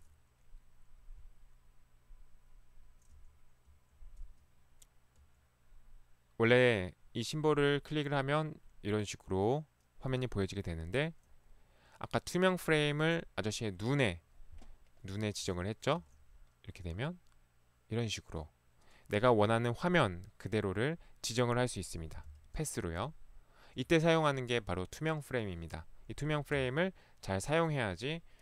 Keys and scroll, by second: 0.0 Right, 3.1 Right, 3.8 Right, 5.1 Right, 16.1 Right, 22.3 Left, 26.6 Escape.